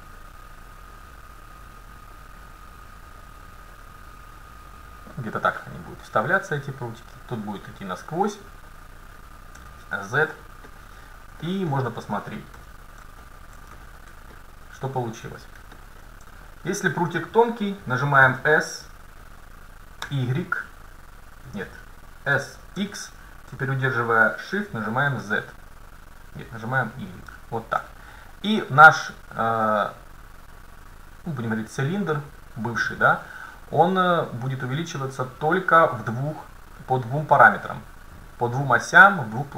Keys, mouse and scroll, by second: 9.6 z, 11.5-13.4 middle drag, 12.6 a, 14.4-16.1 scroll down 1, 16.1 middle click, 16.5-18.4 right drag, 18.4 s, 22.4 s.